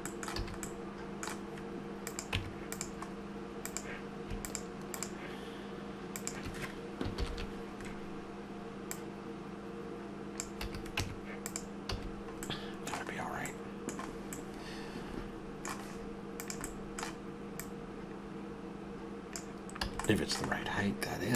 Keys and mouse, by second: 0.4 a, 2.0 click, 2.3 Tab, 7.2 ctrl+l, 10.6 a, 11.0 Tab, 11.9 a, 16.4-19.3 right drag, 19.9 a.